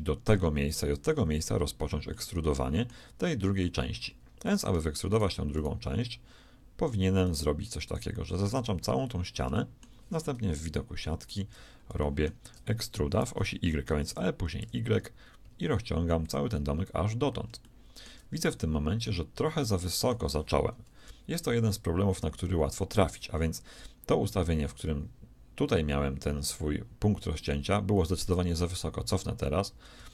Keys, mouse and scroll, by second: 2.1-3.9 middle drag, 4.4 right click, 8.9-10.6 right drag, 9.5-10.6 drag, 10.6 middle click, 10.6 KP_3, 11.7-12.9 middle drag, 14.1 e, 16.9-20.1 middle drag, 20.1 click, 21.9 KP_3, 28.5 ctrl+z, 28.9 ctrl+z, 29.9 a.